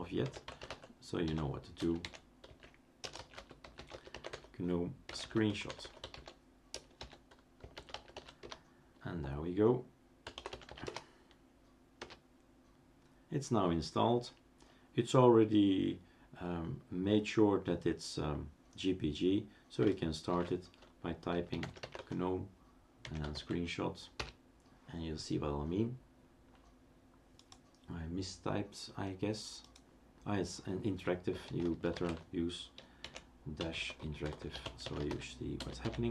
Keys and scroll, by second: 0.0-8.6 typing, 10.1-11.2 typing, 20.7 shift+super+d, 21.1-23.7 typing, 24.1 Return, 31.1-36.1 typing.